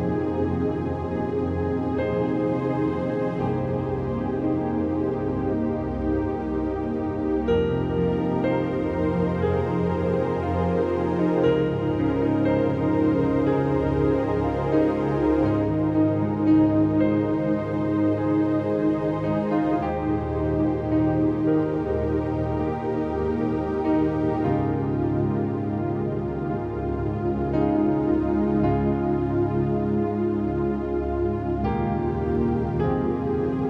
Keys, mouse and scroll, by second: 0.0-0.4 typing, 1.8 ], 3.1 click, 5.4 ctrl+z, 6.2 v, 6.6 click, 6.9 right click, 7.9 click, 9.7 click, 12.0-15.0 drag, 16.4-20.1 drag, 20.1 v, 21.7 click, 22.1 scroll up 1, 22.4 click, 22.5 ctrl+scroll down 1, 23.0 click, 23.3-25.9 ctrl+drag, 25.9-27.0 alt+drag, 27.0 Return, 27.7-32.2 drag, 32.2 click, 33.3 Return.